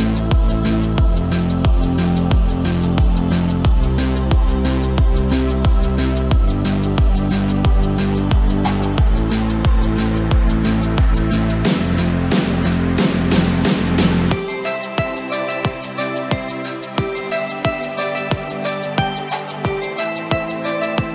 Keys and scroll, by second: 1.0 ctrl+t.